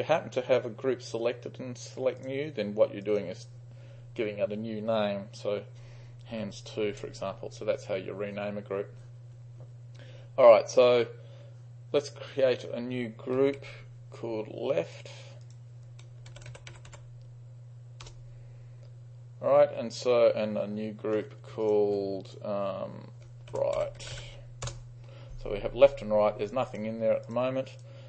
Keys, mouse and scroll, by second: 2.2-3.3 drag, 6.4 2, 7.0 Return, 13.2-14.2 typing, 14.9-15.6 drag, 16.2-17.5 typing, 17.8 click, 18.2 Return, 18.7 shift+click, 21.7 ctrl+drag, 22.0 click, 22.3 drag, 23.4-24.8 typing, 23.6 shift+click, 24.3 click, 26.7-27.1 drag, 27.3 drag, 27.8 drag.